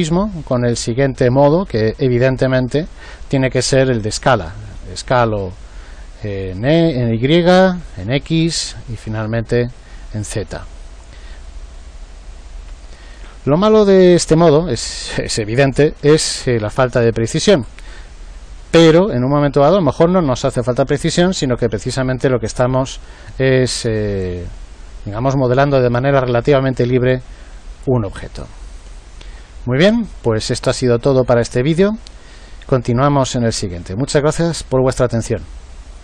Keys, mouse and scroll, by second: 1.7 click, 3.5 click, 7.4-10.0 drag, 11.5 click, 13.3 click, 16.1 ctrl+z, 16.4 ctrl+z, 16.7 ctrl+z, 17.0 ctrl+z, 29.3-34.6 middle drag.